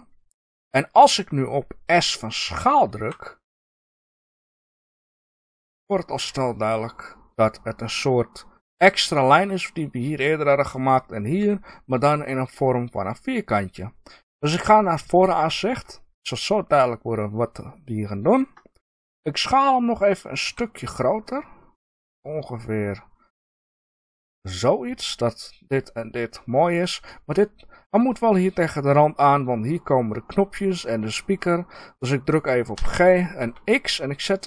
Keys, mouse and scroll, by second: 5.7 click, 6.1 middle click, 11.3-15.3 middle drag, 15.4 KP_1, 18.3-18.6 scroll up 1, 20.4-24.5 middle drag, 20.4 s, 24.5 click.